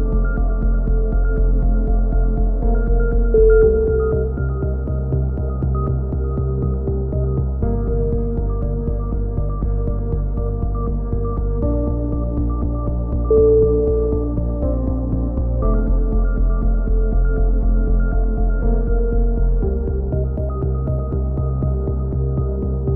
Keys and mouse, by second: 0.0-1.8 drag, 1.9 click, 1.9 a, 2.4 z, 3.5 click, 3.7 right click, 4.3 KP_1, 4.4 z, 4.6 click, 5.7 z, 6.1 z, 7.2 click, 7.8 c, 8.0 right click, 8.3 click, 8.9 click, 9.9 click, 11.0 a, 11.2 click, 11.2 z, 13.0 right click, 13.6 click, 13.6 KP_3, 13.9 KP_1, 14.1 z, 14.3 click, 14.5 e, 14.9 click, 16.1 s, 16.7 click, 17.3 click, 17.4 z, 17.9 z, 18.3 click, 19.0 z, 19.2 click, 19.6 KP_3, 20.1 click, 20.6 z, 20.9 click, 22.1 click, 22.9 KP_7.